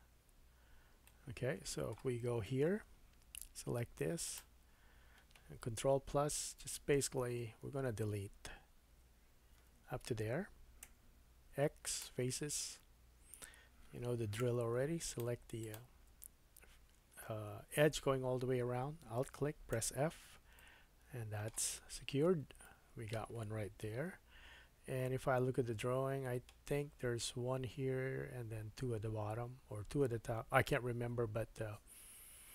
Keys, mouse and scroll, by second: 2.5 3, 2.7-4.1 scroll up 2, 4.2 click, 6.1 ctrl+KP_Add, 6.4 ctrl+KP_Add, 6.7 ctrl+KP_Add, 7.0 ctrl+KP_Add, 7.2 ctrl+KP_Add, 7.4 ctrl+KP_Add, 7.7 ctrl+KP_Add, 7.9 ctrl+KP_Add, 8.1 ctrl+KP_Add, 8.9 ctrl+KP_Add, 10.8 x, 12.6-13.1 scroll up 3, 13.1-13.9 scroll down 2, 14.4 2, 15.1 click, 15.6 alt+click, 15.7-32.5 alt+middle drag, 19.7 f, 21.8 scroll down 3, 22.3 Tab, 23.8 KP_1.